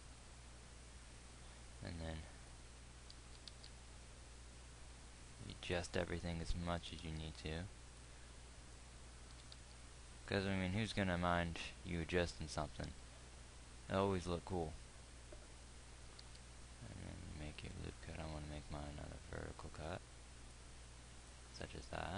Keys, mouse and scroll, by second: 3.6 g, 7.3 g, 9.9 g.